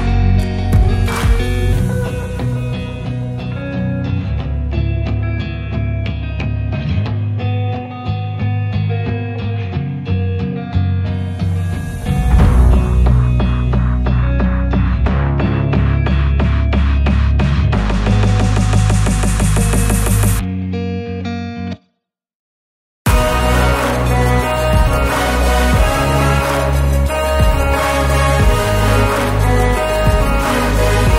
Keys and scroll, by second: 0.3 m, 1.2 Up, 2.5 space, 2.8 e, 4.1 space, 4.5 p, 5.3 space, 10.1 Return, 11.2 1, 12.2 Return, 12.9 l, 13.9 space, 14.3 p, 15.7 space, 16.5 Delete, 17.4 Delete, 18.2 m, 20.1 Return, 22.0 Return, 22.3 space, 23.0 m, 23.8 Up, 27.9 space, 28.9 Delete.